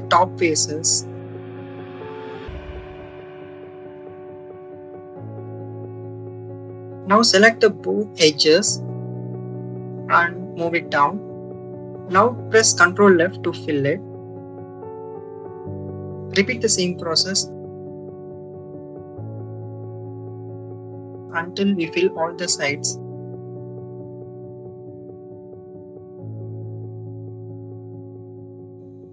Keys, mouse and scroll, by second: 1.2 click, 3.5 click, 5.1 click, 6.6 ctrl+click, 7.6 click, 8.0 click, 9.4 shift+click, 9.8 shift+click, 10.9 click, 16.1 shift+click, 19.6 shift+click, 21.1 click, 22.2 shift+click, 24.1 click, 25.7-28.0 drag, 28.7 click.